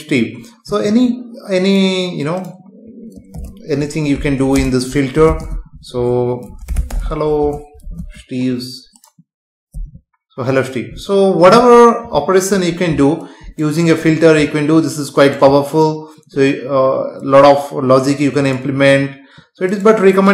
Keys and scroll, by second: 4.5 space, 5.5 Left, 7.4 space, 8.0 ctrl+s, 9.8 F5.